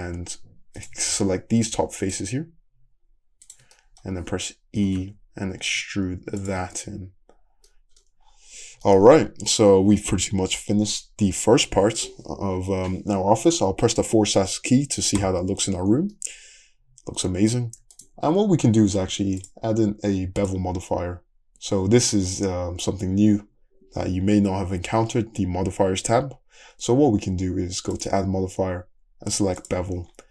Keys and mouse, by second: 0.1 3, 0.8 click, 2.1 shift+click, 3.5 shift+click, 4.8 e, 6.6 Tab, 8.8-19.4 middle drag, 15.2 /, 19.4 click, 19.5-20.5 middle drag, 20.5-23.3 drag.